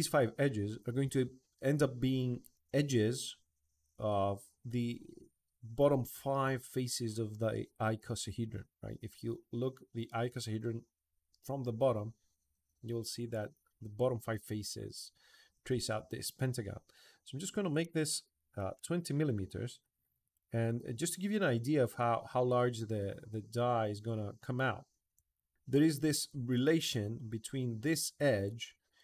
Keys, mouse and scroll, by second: 19.6 middle click, 20.5 middle click, 23.6 middle click, 25.1 right click, 25.5 click.